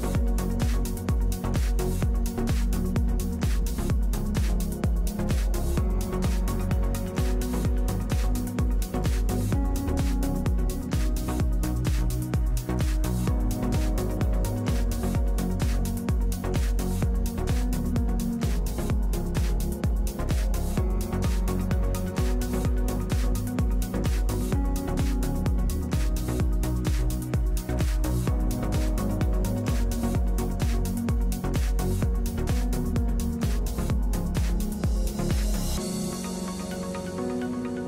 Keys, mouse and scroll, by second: 0.4 middle click, 0.6 click, 0.7 click, 0.8 middle click, 2.5 middle click, 6.1 middle click, 11.1-13.0 middle drag, 13.4-14.4 middle drag, 15.1 middle click, 20.9-22.4 middle drag, 21.4 click, 21.4 right click, 28.8 ctrl+z, 28.9 ctrl+z, 30.2-33.1 drag, 33.1-34.3 middle drag, 34.3-36.7 drag, 37.1 middle click, 37.7-37.8 drag.